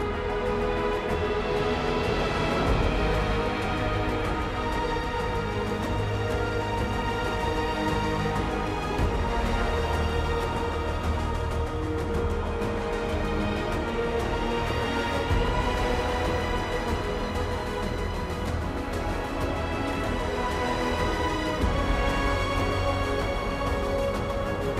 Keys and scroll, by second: 0.0 ctrl+t, 1.8 ctrl+e, 2.5 ctrl+z, 4.3 ctrl+e, 9.8 ctrl+t.